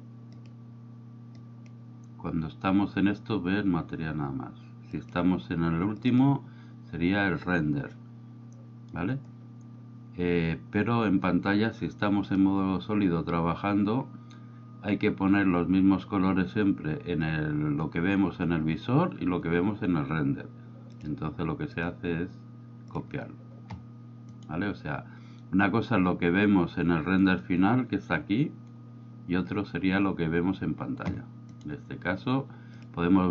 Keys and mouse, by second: 0.4 click, 1.4-5.1 drag, 6.0-7.4 drag, 20.9 click, 24.3 right click, 32.9 click.